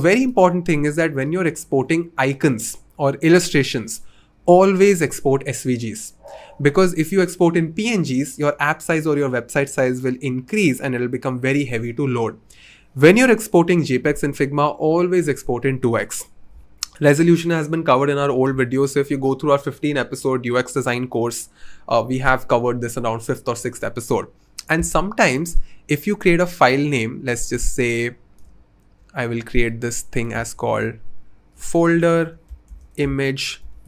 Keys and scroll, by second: 30.5 super+r, 31.3-33.8 typing.